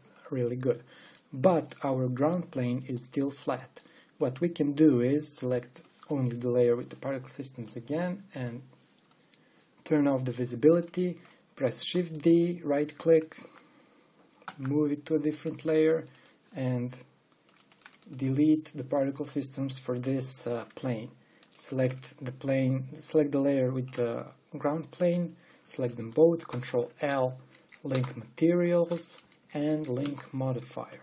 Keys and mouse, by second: 0.1-1.7 middle drag, 1.7-3.9 drag, 2.5-3.6 middle drag, 4.1 click, 5.9-7.0 drag, 7.0 middle click, 8.7-11.6 drag, 12.4 shift+d, 15.1 m, 16.8-18.2 drag, 20.8-22.0 drag, 23.4 click, 25.6-27.1 drag, 27.1 ctrl+l, 28.2 Down, 29.3 ctrl+l, 30.1 Down, 30.8 Down.